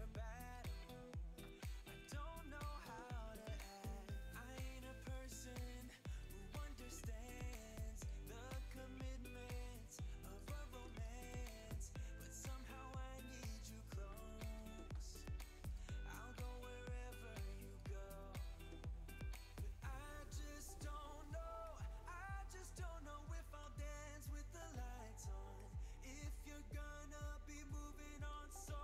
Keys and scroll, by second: 3.8 space, 11.0 space.